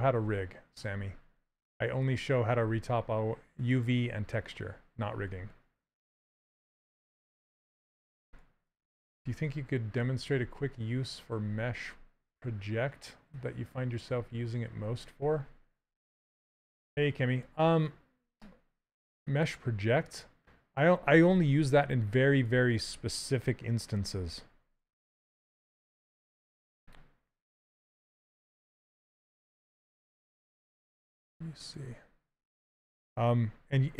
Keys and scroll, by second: 28.3 shift+f.